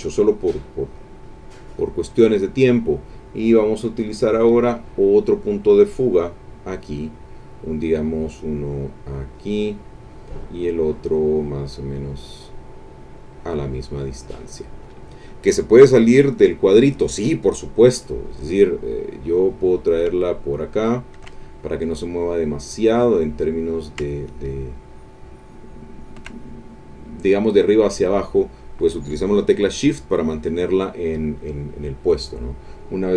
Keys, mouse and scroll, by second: 0.8 click, 1.8 click, 2.2 middle click, 6.1 middle click, 9.1 click, 13.6 click, 19.0-21.3 drag, 22.5 middle click, 23.8-26.2 shift+drag, 27.9 middle click, 32.1 click.